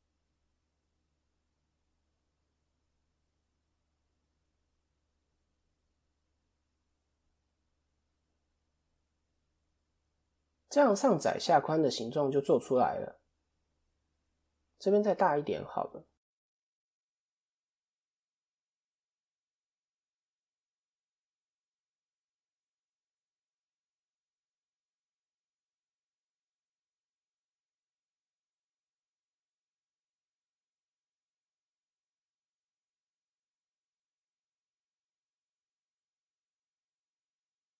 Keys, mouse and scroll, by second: 3.2 click, 3.5-4.4 scroll down 1, 4.4-5.1 scroll down 3, 5.1 Tab, 5.1-5.5 scroll up 2, 5.8 click, 6.3 middle click, 9.7 click, 10.2-10.6 scroll down 1, 10.6 KP_1, 11.6 KP_3, 17.2 click, 18.4 Tab, 18.6 click, 19.5 right click, 20.2 click, 21.4 Tab, 22.3 click, 23.2 Tab, 23.6 click, 25.2 s, 34.6 click, 35.9 click.